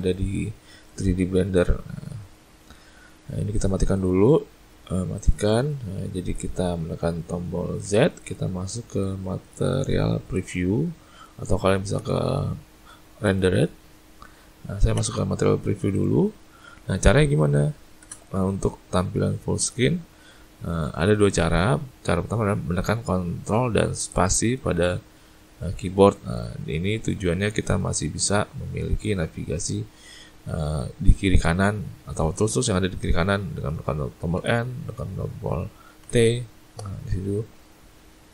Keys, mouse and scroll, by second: 0.0 click, 0.9 click, 1.2 click, 4.0 click, 5.2 click, 7.9 z, 12.0 z, 15.0 z, 18.1 space, 24.3 ctrl+space, 34.4 n, 36.1 t.